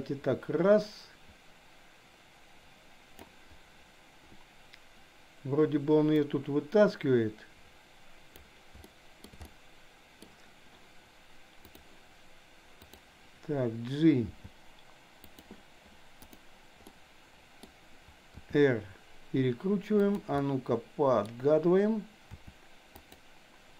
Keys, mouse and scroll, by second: 6.2-8.4 drag, 8.8 shift+middle click, 9.4 middle click, 12.8 click, 14.4 g, 16.3 click, 16.9 middle click, 18.3 r, 20.3-21.3 middle drag, 22.3 r.